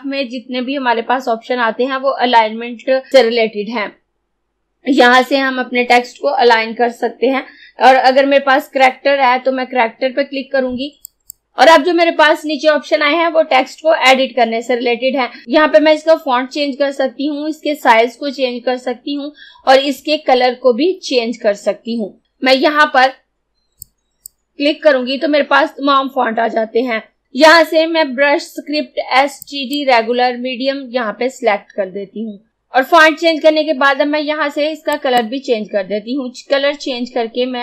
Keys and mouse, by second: 11.1 click, 23.9-26.8 drag, 29.4-32.4 drag, 32.5 click, 35.0 click.